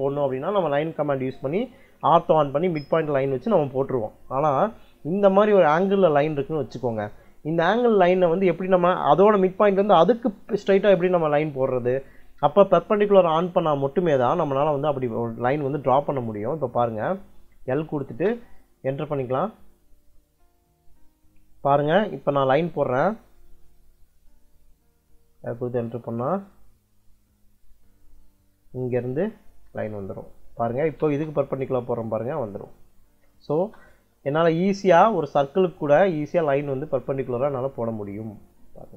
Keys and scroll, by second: 16.5 l, 17.9 space, 30.3 space, 33.4 space.